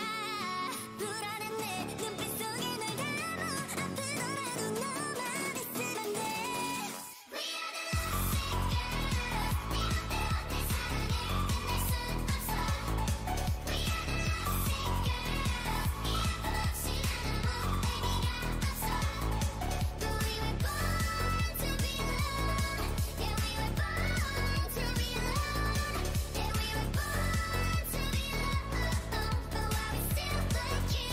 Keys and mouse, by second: 0.6 KP_1, 7.6-11.1 right drag, 7.9 z, 10.4-12.2 drag, 12.7 z, 15.8 s, 20.0-24.2 drag, 20.3 x, 21.8 x, 22.6 g, 26.9 g, 28.0 s.